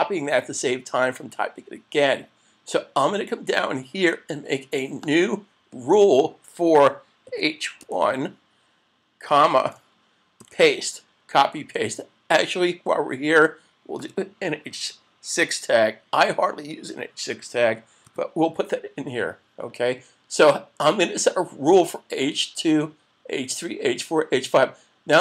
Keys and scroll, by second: 10.4 super+v.